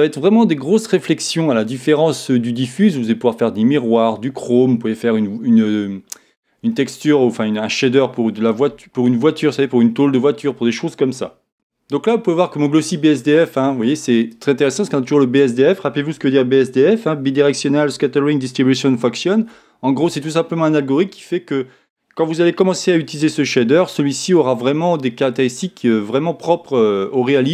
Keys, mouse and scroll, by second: 14.3-16.2 drag.